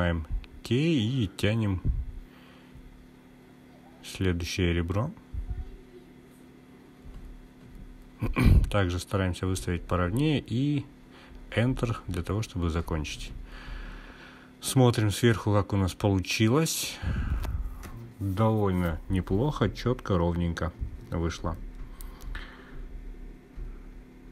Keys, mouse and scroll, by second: 15.0 click, 18.2 click, 20.2-21.2 scroll up 1, 21.2-23.2 scroll up 1.